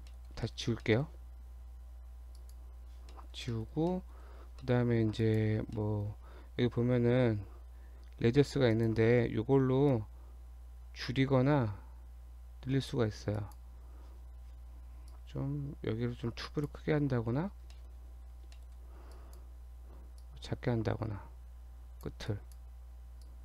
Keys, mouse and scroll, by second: 0.2 middle click, 0.5 shift+middle click, 0.8 shift+middle click, 2.3 click, 3.1 middle click, 3.5 shift+middle click, 3.7 shift+scroll up 1, 3.9 middle click, 4.4-4.9 scroll up 3, 4.7 shift+middle click, 5.2 click, 5.8 middle click, 8.7 click, 9.9 click, 13.4 click, 15.1 click, 17.1-17.7 scroll down 2, 17.8 shift+middle click, 18.1-18.5 shift+scroll up 2, 18.6 shift+middle click, 19.1 click, 20.2 click, 22.3 click, 23.3 click.